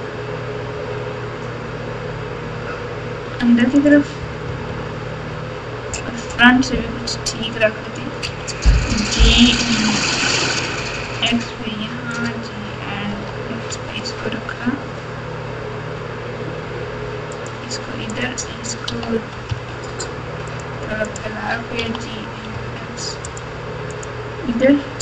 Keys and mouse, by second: 4.4 KP_4, 4.6 KP_4, 4.8 KP_4, 5.0 KP_4, 7.3 click, 8.2 g, 12.2 click, 13.0 g, 18.1 click, 18.8 g, 21.8 g, 23.9 click.